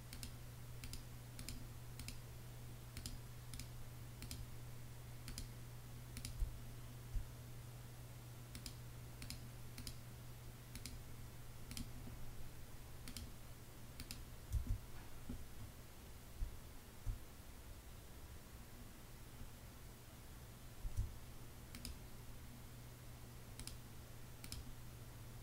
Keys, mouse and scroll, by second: 5.9 space, 14.0 space, 15.9 space, 20.3 space.